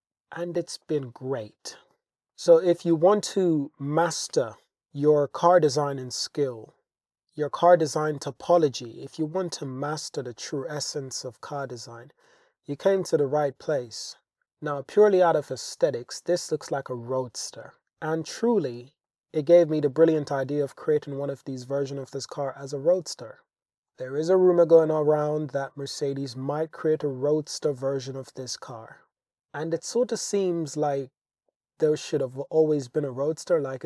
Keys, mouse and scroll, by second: 1.8 middle drag, 2.1 shift+click, 2.3 middle click, 14.8-17.5 middle drag, 18.3-18.8 shift+middle drag, 19.1-21.0 middle drag, 22.1-23.0 shift+middle drag, 27.8-28.2 shift+drag, 28.4-29.1 drag.